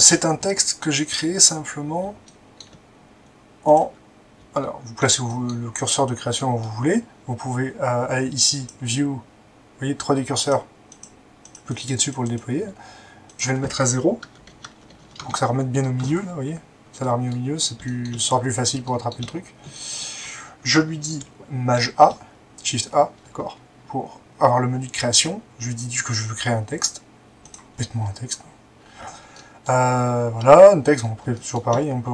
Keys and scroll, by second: 14.2 0, 14.5 Tab, 14.6 0, 14.9 Tab, 15.0 0, 15.2 Return, 21.7 a.